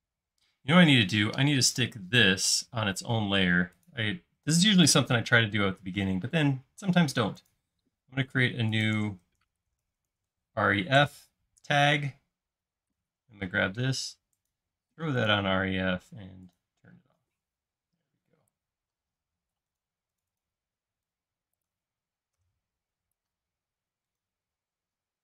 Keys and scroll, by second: 1.0 space, 9.5-10.6 typing, 11.0 Return, 19.0 e, 22.4 BackSpace, 23.5 e, 25.1-25.2 typing.